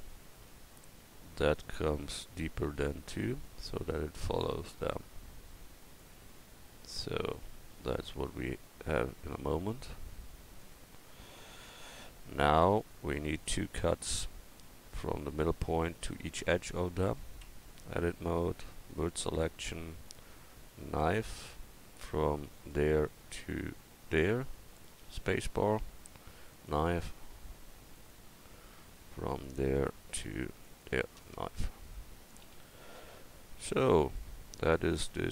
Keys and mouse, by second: 1.4-5.1 right drag, 2.7-5.1 drag, 6.5 Tab, 9.3 KP_4, 10.5 KP_0, 11.0 KP_1, 17.4 Tab, 20.9-25.0 drag, 26.5-31.2 drag, 32.4 a.